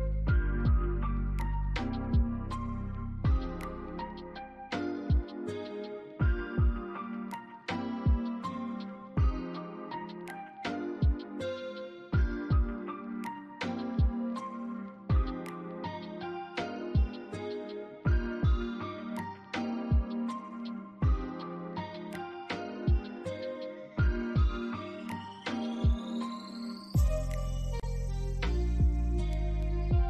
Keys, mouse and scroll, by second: 0.1 alt+click, 1.9 BackSpace, 2.8 alt+click, 4.3 shift+click, 5.6 ctrl+z, 6.0 shift+click, 6.4 shift+scroll down 1, 6.8 alt+click, 7.1 alt+middle click, 7.4 scroll down 1, 7.6 s, 8.0 scroll down 1, 8.2 s, 8.3 alt+click, 8.9 alt+middle click, 9.2 scroll up 2, 9.9 right click, 11.7 alt+middle click, 13.3 alt+middle click, 16.6 alt+click, 19.5 alt+click, 20.3 double click, 21.5 scroll down 1, 22.2 alt+middle click, 22.8 alt+click, 23.6 alt+middle click, 24.9 double click, 26.0 alt+click, 26.7 scroll up 1, 27.7 alt+middle click, 29.1 alt+click.